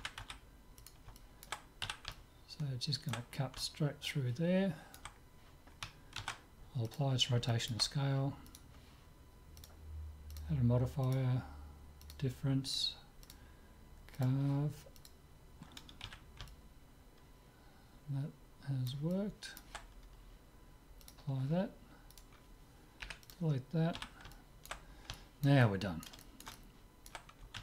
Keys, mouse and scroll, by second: 0.1 s, 1.2-7.3 middle drag, 1.8 z, 6.2 ctrl+a, 7.5-9.5 middle drag, 8.5 click, 9.5 right click, 9.6-16.0 drag, 16.2 z, 16.5-18.3 middle drag, 19.1-20.9 middle drag, 21.1-22.8 drag, 22.1-24.1 right drag, 23.2 Delete, 24.1 z, 24.3-27.6 middle drag.